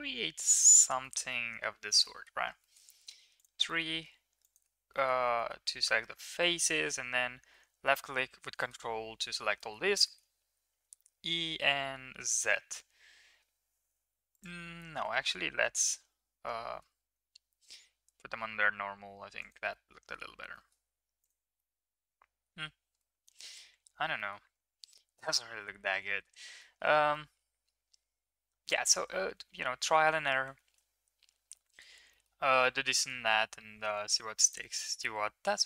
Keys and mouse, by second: 1.0 click, 2.2 middle click, 2.6 middle click, 3.1 3, 3.3 click, 3.6 middle click, 4.4 ctrl+click, 4.9 middle click, 5.4 middle click, 6.4 middle click, 8.6 shift+middle drag, 9.7 middle click, 10.7 e, 14.9 ctrl+z, 15.8 e, 19.7-20.2 middle drag, 20.5 middle drag, 20.9 Tab, 21.2 click, 21.5-22.4 middle drag, 22.9-23.5 middle drag, 23.7 ctrl+z, 24.1 middle click, 24.6 ctrl+z, 25.4 ctrl+z, 26.5 middle drag, 27.1-28.2 middle drag, 28.7 middle click, 29.0 ctrl+z, 29.4 ctrl+z, 29.8 ctrl+z, 30.6 ctrl+z, 31.7 ctrl+z, 32.1 middle click, 34.4 click.